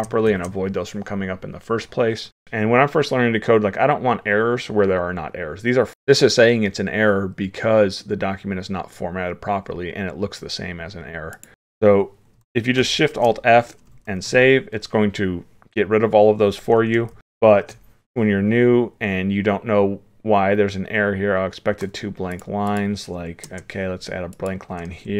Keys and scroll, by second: 2.3 ctrl+z, 12.9 alt+shift+f, 14.1 ctrl+s, 17.2 ctrl+z, 17.4 ctrl+s.